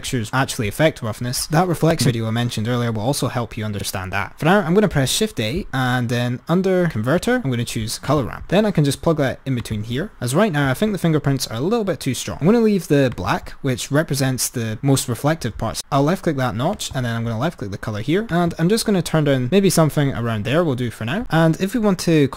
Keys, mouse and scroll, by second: 5.0 shift+a, 10.2-12.2 drag, 13.3 click, 16.9 click, 19.5 click.